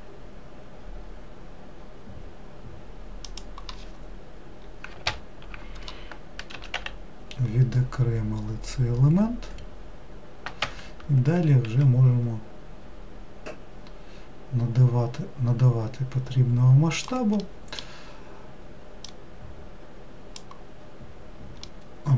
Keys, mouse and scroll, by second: 5.1 ctrl+l, 6.5 s, 11.7 s, 17.4-19.1 middle drag, 19.1 click, 21.7-22.1 middle drag.